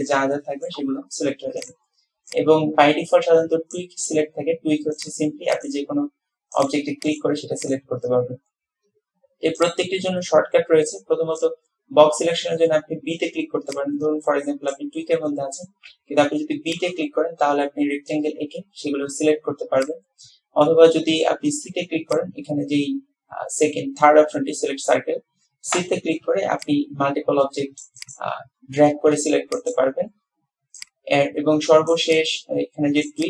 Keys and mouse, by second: 0.1-0.8 drag, 1.8 click, 2.4-3.9 drag, 5.1 click, 5.6 click, 6.7 click, 7.2 click, 7.7 click, 9.7-11.5 drag, 13.8-14.8 drag, 15.9 b, 19.9-21.3 drag, 22.2-25.0 drag, 25.9 v, 26.4 c.